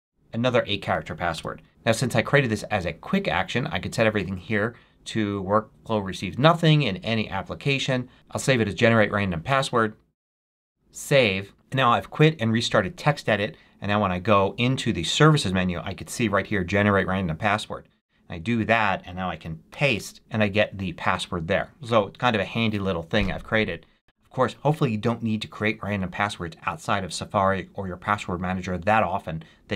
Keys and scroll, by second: 1.3 Return, 8.1 d, 19.6 super+v.